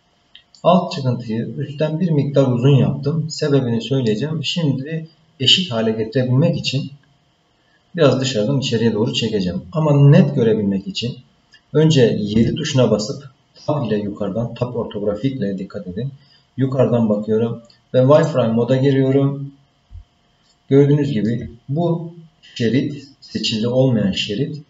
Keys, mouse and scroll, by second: 0.6-4.1 middle drag, 12.3 KP_7, 18.1 click, 19.4-19.9 scroll up 3, 20.4 shift+middle click.